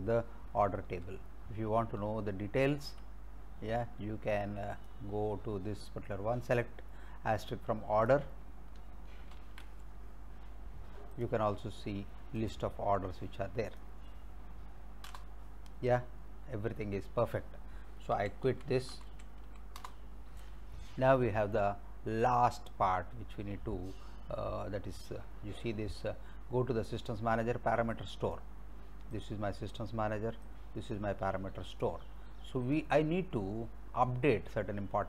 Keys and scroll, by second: 1.1 alt+Tab, 9.4 ctrl+c, 15.1 Return, 18.2-20.0 typing.